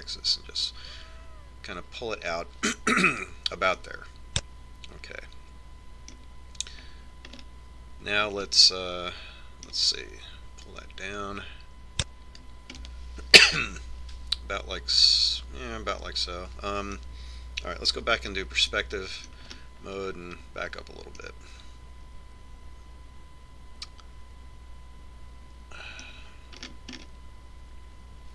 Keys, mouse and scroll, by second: 4.9-6.7 middle drag, 8.6-11.5 middle drag, 11.9-13.6 drag, 14.1-15.9 middle drag, 19.4 KP_5, 20.2 middle click, 20.6 middle click, 21.8-24.2 middle drag, 27.9-28.3 middle drag.